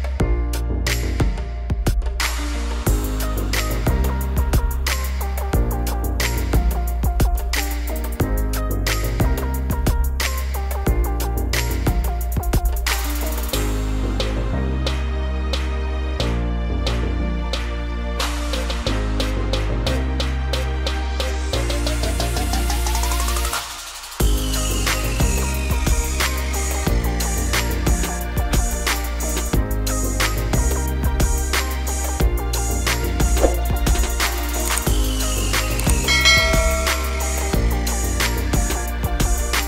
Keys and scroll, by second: 39.2 Down.